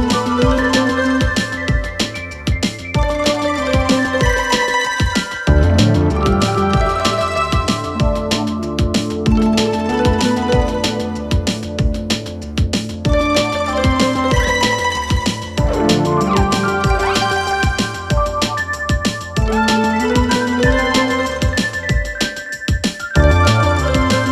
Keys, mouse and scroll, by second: 0.1-4.4 click, 6.2 alt+Num_Lock, 6.5 alt+], 7.4-10.5 click, 12.0-13.4 typing, 13.8 click, 14.9 Return, 16.6 click, 20.4 alt+[, 21.2-24.3 click.